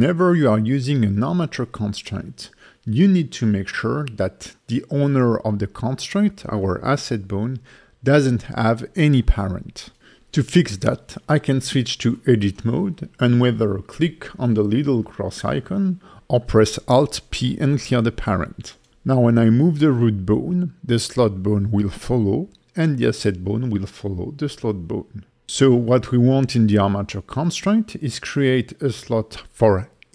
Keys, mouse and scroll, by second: 1.9 click, 2.9 click, 8.4 Tab, 16.5 alt+p, 18.8 Tab, 19.4 click, 19.9 g, 21.7 right click, 22.3 click, 22.8 middle click, 24.5 click, 26.6 click, 27.1 click, 28.8 click, 30.0 click.